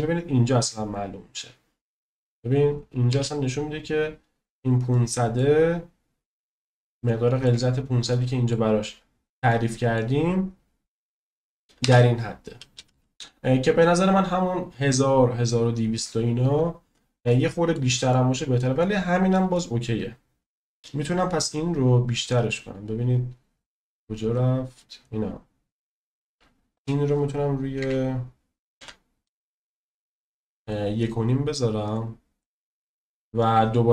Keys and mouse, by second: 3.3 space, 4.9 middle click, 7.0-7.5 middle drag, 8.1-8.5 middle drag, 9.6 middle click, 11.9 space, 17.3-17.7 shift+middle drag, 18.1 middle click, 18.8-19.3 shift+middle drag, 19.5 middle click, 26.7-30.8 drag, 31.9 click, 32.4 click.